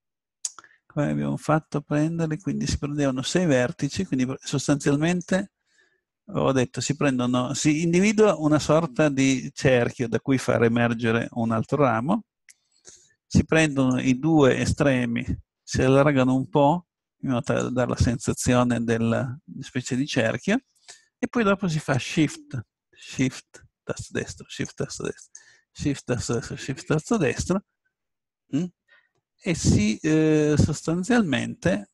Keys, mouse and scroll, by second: 1.6-3.7 middle drag, 5.1-10.3 right drag, 13.8-15.6 drag, 15.6 s, 17.6-20.6 drag, 22.1-28.5 drag, 28.5 middle click.